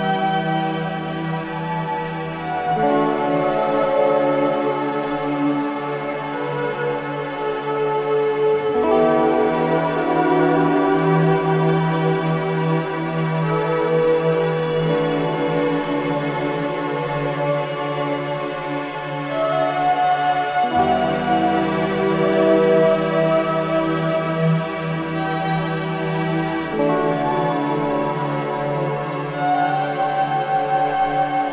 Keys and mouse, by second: 0.4 f, 3.1 ctrl+b, 6.6 Tab, 8.9 Tab, 9.8 click, 11.4 ctrl+shift+click, 13.0 click, 13.7 ctrl+shift+click, 14.4 ctrl+shift+click, 16.7 click, 18.7 alt+shift+click, 19.4 click, 20.2 alt+shift+click, 22.4 f, 24.7 ctrl+b, 27.6 Tab, 29.4 Tab, 30.4 click.